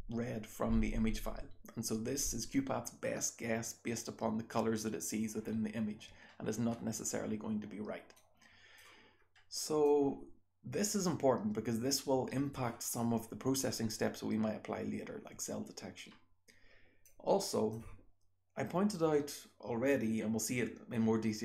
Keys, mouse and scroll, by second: 7.1-8.1 scroll down 1, 8.1-8.8 scroll down 1, 8.2 click, 8.8-9.4 scroll down 1, 9.4-10.7 scroll up 1, 9.9-12.5 drag, 10.7-12.5 scroll up 1, 12.5-15.7 scroll up 1, 13.0 click, 15.7-17.1 scroll up 1, 17.1-17.7 drag.